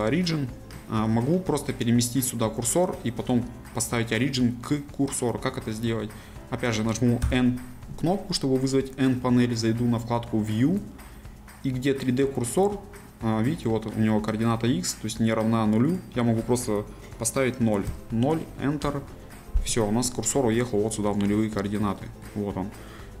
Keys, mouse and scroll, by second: 15.9-18.9 drag, 18.9 KP_Enter, 21.4 scroll up 2, 22.0-23.2 shift+middle drag.